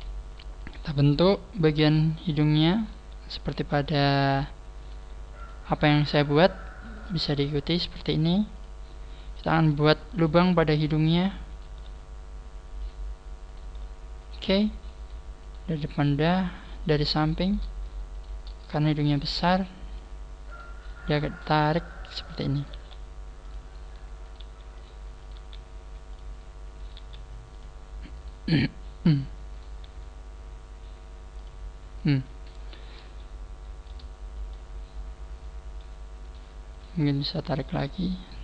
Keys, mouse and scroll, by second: 0.7 right click, 1.7 g, 2.8 click, 2.8 right click, 2.9 g, 3.9 right click, 4.0 g, 4.8 right click, 4.9 g, 5.9 right click, 6.1 g, 6.9 right click, 7.1 g, 8.1 right click, 8.2 g, 9.1 right click, 9.3 g, 10.1 right click, 10.3 g, 11.5 right click, 11.7 g, 13.5 right click, 13.7 g, 15.4 right click, 16.3 right click, 17.2 right click, 18.1 shift+right click, 19.2 click, 20.5 right click, 21.1 click, 22.6 right click, 22.7 g, 24.2 right click, 24.4 g, 25.2 right click, 25.3 g, 26.8 right click, 26.9 g, 28.2 right click, 28.4 g, 29.5 right click, 29.7 g, 32.0 right click, 33.3 shift+middle click, 34.5 shift+middle click, 36.2 right click, 36.7 shift+right click, 37.5 click.